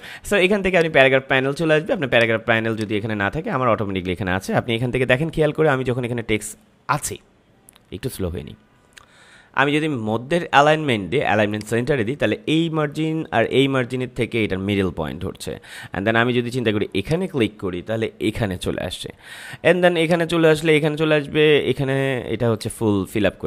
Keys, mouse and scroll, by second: 0.7-11.5 drag, 17.0 click, 20.0 click, 22.5 click.